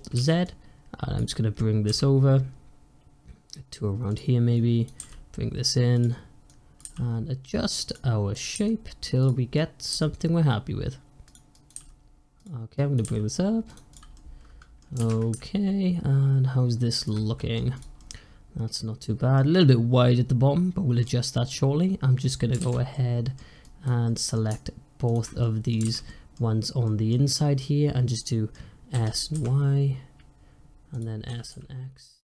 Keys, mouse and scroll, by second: 0.0 alt+z, 0.3 click, 1.7 g, 4.4 click, 4.9 g, 6.4 click, 6.7 g, 8.2 click, 8.4 g, 9.4 click, 9.8 g, 11.4 click, 11.6 g, 12.6 click, 12.9 g, 13.8 click, 14.0 middle click, 14.9 alt+z, 17.2 middle click, 17.6 click, 17.9-22.4 middle drag, 22.4 alt+z, 22.8 middle click, 23.5 click, 23.9-24.9 middle drag, 24.9 shift+click, 25.3 middle click, 25.7 alt+z, 25.9-28.8 middle drag, 28.8 s, 31.2 s.